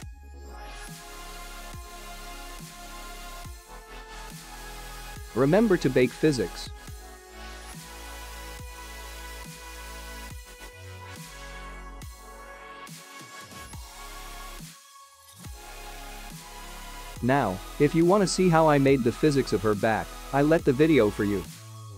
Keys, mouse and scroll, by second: 0.0 ctrl+s, 0.8-3.6 scroll down 8, 3.6 click, 6.0 click, 20.4 click, 21.4 click.